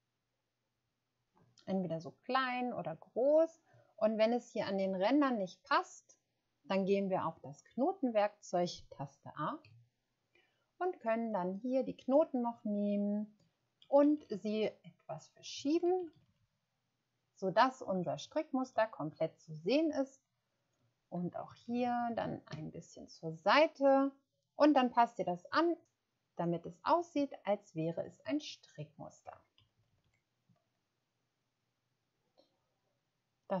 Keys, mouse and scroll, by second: 9.6 a, 13.7 Down, 14.0 Down, 14.1 Down, 14.2 Down, 15.5 Down, 15.7 Down, 15.8 Down, 15.9 Down, 16.0 Down, 16.2 Down, 16.3-19.6 Down, 21.6 Right, 21.7 Right, 21.9 Right, 22.0 Right, 22.4 Right, 27.1 Right, 29.2 Right, 29.8 Left, 30.0 Left.